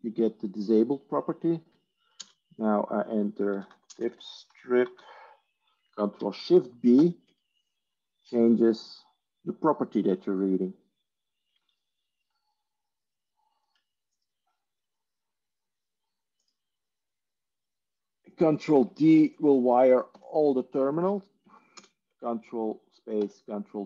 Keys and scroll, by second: 2.1 ctrl+space, 3.1-5.4 typing, 6.9 ctrl+shift+b, 20.1 ctrl+d, 21.7 ctrl+space, 23.3 ctrl+d.